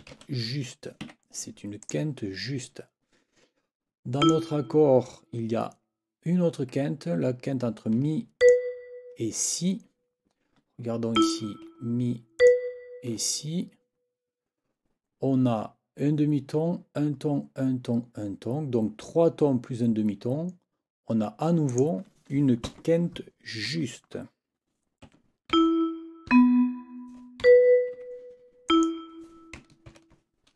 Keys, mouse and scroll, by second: 0.0-0.6 typing, 1.0 Escape, 1.8 click, 4.2 click, 8.4 ctrl+click, 11.2 click, 12.4 shift+click, 21.7 click, 22.6 n, 25.0 6, 25.5 e, 26.3 b, 27.4 ctrl+Up, 28.0 ctrl+Escape, 28.7 click, 29.9 ctrl+t.